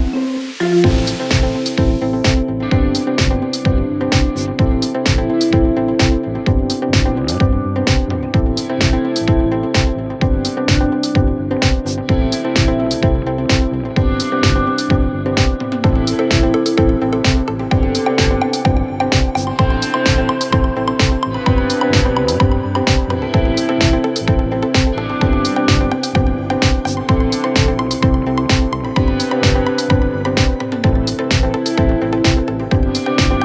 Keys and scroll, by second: 12.3 d, 16.6 f.